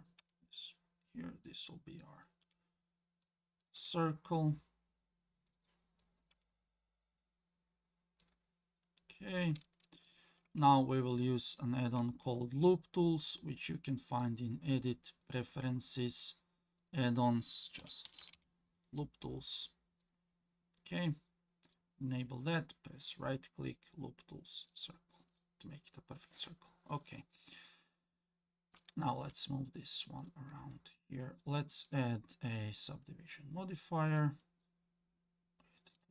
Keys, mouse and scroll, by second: 0.2 g, 2.0 click, 2.4 g, 3.6 click, 3.8 g, 6.0 click, 6.3 g, 10.0 click, 11.0 ctrl+click, 11.5 ctrl+click, 14.2-15.3 drag, 23.0-26.1 right drag, 28.7 click, 29.2 g, 30.8-31.6 scroll down 1, 31.8-34.2 drag, 36.0 click.